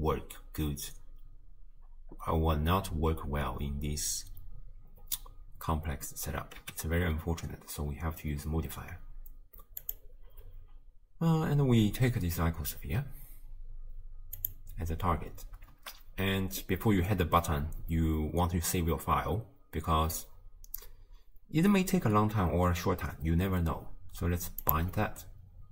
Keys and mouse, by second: 6.8 x, 15.8 shift+space, 24.7-25.7 drag.